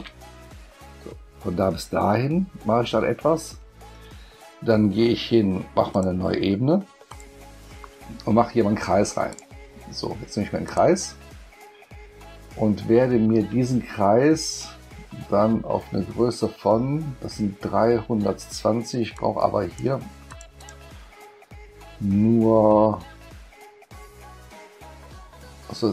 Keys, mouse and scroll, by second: 5.9 click, 7.1 click, 9.3 click, 10.6 click, 19.1 click, 20.3 click, 20.6 click.